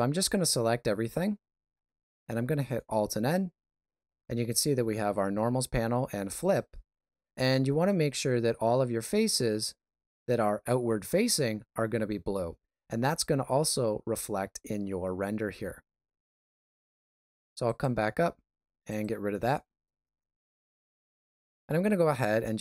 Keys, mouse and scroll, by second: 0.0 a, 2.7 alt+n, 15.9 alt+a, 16.3 middle click, 17.6 click, 21.6 alt+right click, 22.1-22.5 scroll up 3.